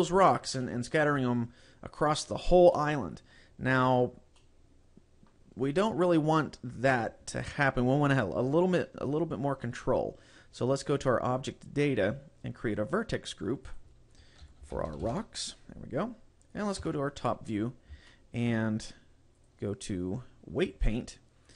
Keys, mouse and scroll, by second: 0.3 shift+middle click, 0.7 middle click, 2.2 scroll down 1, 2.8 middle click, 3.6-4.0 scroll down 2, 4.0 scroll up 1, 4.4 middle click, 11.0 click, 12.7 click, 13.7 click, 16.8 KP_7, 17.8-18.2 scroll down 2, 18.2 shift+middle click, 19.4 click.